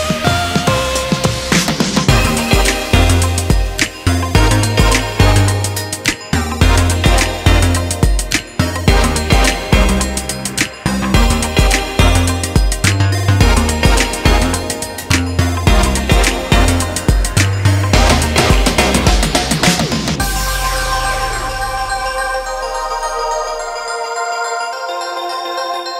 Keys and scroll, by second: 0.2 [, 0.5 [, 22.1 1, 22.6 ].